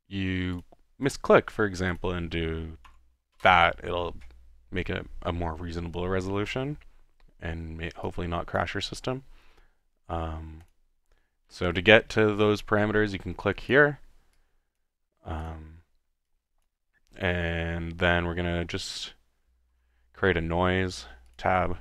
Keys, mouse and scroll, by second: 0.6-1.1 drag, 1.9 click, 6.3 ctrl+z, 13.6-14.0 drag, 16.3 click, 17.0 middle click, 17.6 typing, 19.7 Tab, 21.3 click.